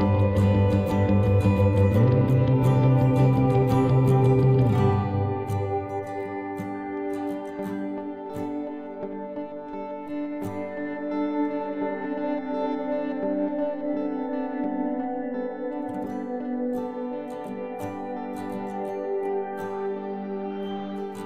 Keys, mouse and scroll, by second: 1.7 c, 11.4 middle click, 12.8 x, 13.7 c, 16.8 click, 17.2-18.6 middle drag, 18.2 c, 19.6-21.2 drag.